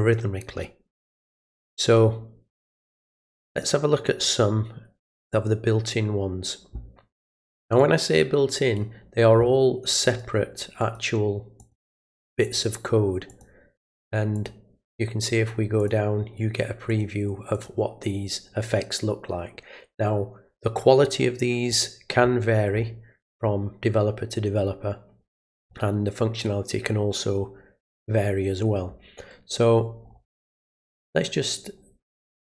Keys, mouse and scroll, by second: 5.2 click, 7.8 click, 10.0 click, 10.8 click, 11.6 click, 12.4 click, 13.3 click, 14.4 click, 15.8 click, 16.9 click, 17.6 click, 21.7 scroll down 1, 22.3 middle click, 22.3-22.7 scroll down 2, 23.5 scroll down 1, 25.6 scroll down 1, 30.1-30.4 scroll up 1, 30.8 scroll up 1, 32.2-32.5 scroll down 1.